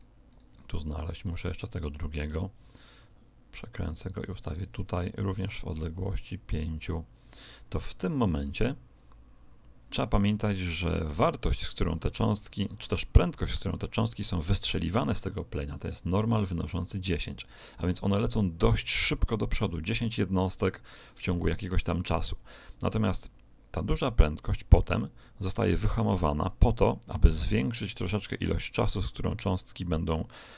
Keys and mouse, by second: 1.8 t, 2.6 t, 2.6 right click, 2.9 r, 5.2 click, 8.9 click, 22.6 click.